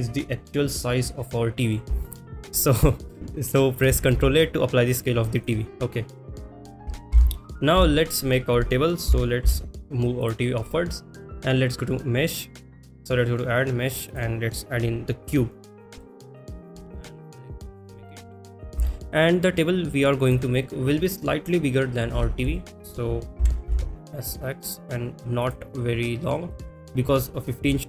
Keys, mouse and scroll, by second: 2.0-2.5 shift+middle drag, 2.7 middle drag, 7.7 n, 7.7 KP_1, 10.2 click, 10.2 g, 10.2 z, 11.2-14.2 drag, 16.0 shift+middle click, 16.7 s, 22.5 shift+middle drag, 23.4 s, 23.8 x, 26.5-27.2 middle drag, 27.6 KP_3.